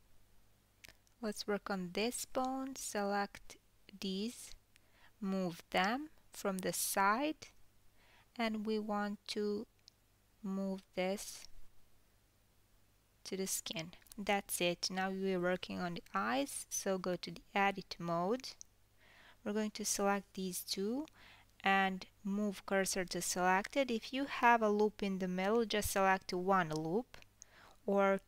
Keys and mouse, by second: 2.2-2.8 middle drag, 2.4 h, 2.8 ctrl+z, 3.2 click, 4.5 shift+middle click, 4.9 shift+click, 5.0 shift+middle click, 6.4 shift+click, 7.9 g, 8.9-11.1 middle drag, 11.2 click, 12.2 g, 15.7 Tab, 15.7 KP_7, 17.6-18.5 middle drag, 18.5 alt+click, 18.6 alt+middle click, 19.6 alt+shift+click, 22.2 shift+s, 22.5-28.2 middle drag.